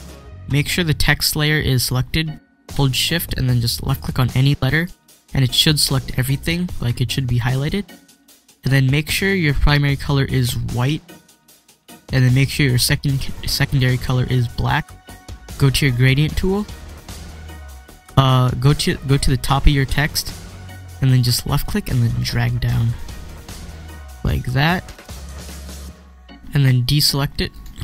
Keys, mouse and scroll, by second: 4.5 shift+click, 11.3 click, 16.7 click, 16.9 click, 21.5-27.5 drag.